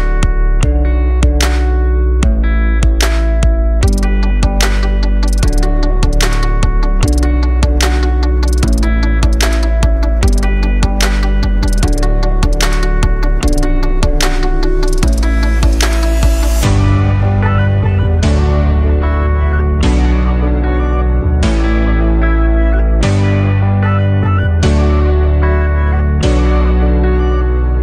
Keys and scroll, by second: 2.0 super+o, 3.6 super+space, 9.6 super+d, 10.1 super+d, 10.6 super+d.